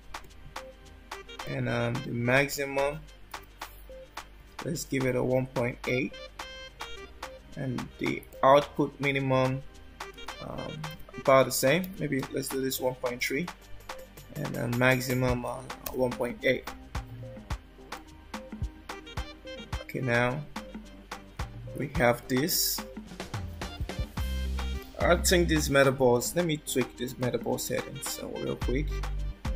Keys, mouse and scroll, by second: 1.5 click, 8.3 click, 14.3 click, 21.5 scroll down 1, 22.1 scroll down 1, 27.3 click, 28.7 click.